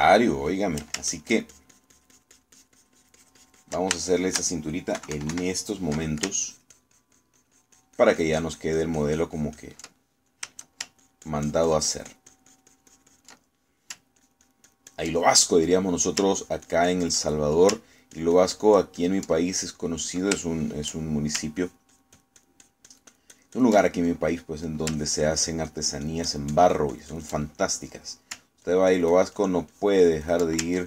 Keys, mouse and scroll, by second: 0.1-1.9 ctrl+shift+middle drag, 2.1-4.9 ctrl+shift+drag, 5.1 ctrl+shift+middle click, 6.0 KP_Subtract, 7.5-10.9 ctrl+drag, 11.3 ctrl+shift+middle click, 12.1-15.1 ctrl+shift+drag, 15.3 ctrl+click, 16.3 ctrl+middle click, 17.5 ctrl+click, 18.3 ctrl+middle click, 18.9-20.3 ctrl+drag, 20.6 ctrl+middle click, 21.5 shift+middle click, 22.7-24.9 ctrl+shift+drag, 25.1 ctrl+middle click, 26.0-28.4 ctrl+drag, 29.7-30.7 ctrl+drag.